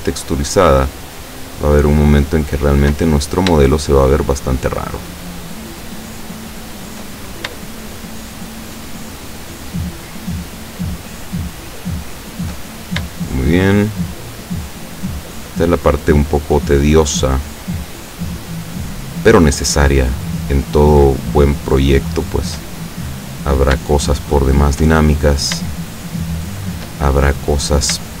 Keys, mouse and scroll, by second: 0.6 shift+right click, 1.2 shift+right click, 2.0 shift+right click, 2.6 shift+right click, 3.2-3.6 shift+scroll up 1, 3.8 shift+middle click, 5.0 shift+right click, 5.8 shift+right click, 6.3 shift+right click, 6.7 shift+right click, 7.3-7.8 scroll down 1, 7.8 shift+middle click, 8.8 shift+right click, 9.4 shift+right click, 9.9 shift+right click, 10.3 shift+right click, 11.3 shift+right click, 11.7 shift+right click, 12.2 shift+right click, 13.2 shift+right click, 14.0 shift+right click, 14.7 shift+right click, 15.1 shift+right click, 15.5 shift+right click, 16.0 shift+right click, 16.7 shift+right click, 17.1 shift+right click, 17.6 shift+right click, 18.1 shift+right click, 18.6 shift+right click, 19.0 shift+right click, 19.6 shift+right click, 20.6 shift+right click, 22.1 shift+right click, 22.7 shift+middle click, 24.2 shift+right click, 24.9 shift+middle click, 25.9 shift+right click, 26.5 shift+right click, 27.0 shift+middle click.